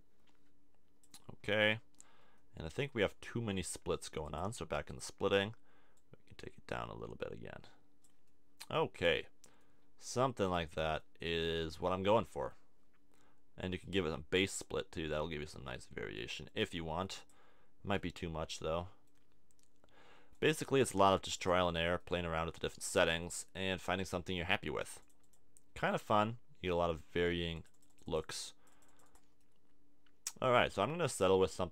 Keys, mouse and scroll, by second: 1.4-4.2 middle drag, 8.3 middle click, 11.0-12.4 middle drag, 15.9-17.2 middle drag, 18.0-20.3 middle drag.